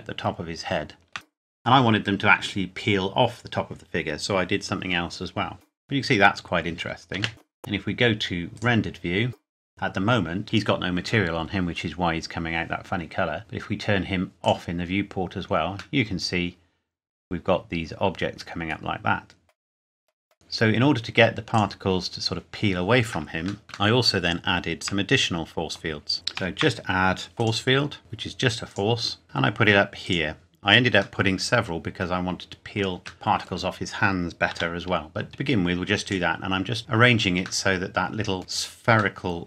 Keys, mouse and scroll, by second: 7.1 shift+middle click, 7.3 space, 8.5 click, 14.4 click, 16.0 middle click, 19.5 scroll up 1, 19.7 scroll down 1, 20.3 click, 23.6 scroll up 1, 24.0 shift+middle click, 26.1 click, 26.3 shift+a, 27.4 click, 28.7 click, 29.2 g, 30.0 click, 31.2 middle click, 33.1 shift+middle click, 34.5 g, 36.1 click, 37.9 middle click.